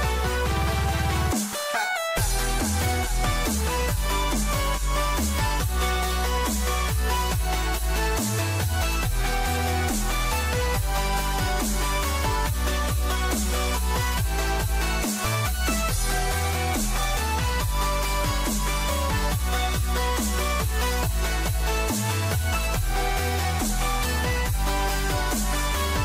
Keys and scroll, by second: 8.8 ctrl+-, 10.0 ctrl+d, 11.2 ctrl+shift+a, 14.9 ctrl+0, 16.6 ctrl+=.